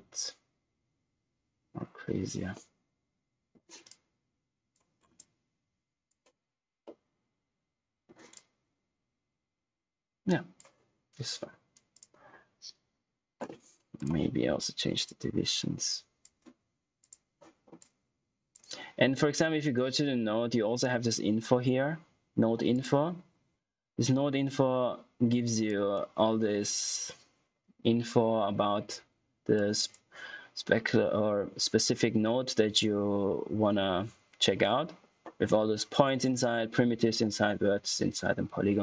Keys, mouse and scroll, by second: 3.8 click, 4.9 scroll down 1, 5.1 click, 6.8 middle click, 8.3 click, 13.9 click, 22.6 click, 25.6 click, 29.5 click.